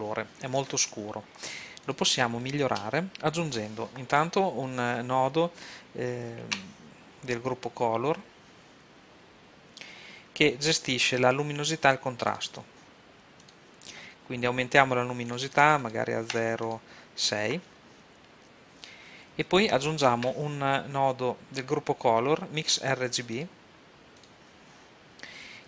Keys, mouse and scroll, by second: 1.8-3.1 drag, 3.1 g, 3.3-5.3 drag, 6.4 shift+a, 13.7-18.6 drag, 20.2 shift+a, 24.5-25.6 drag.